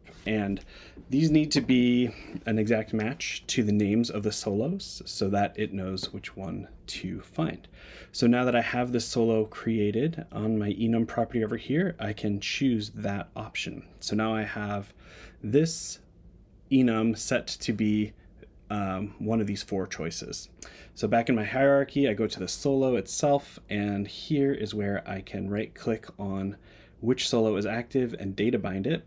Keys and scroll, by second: 0.3 Tab.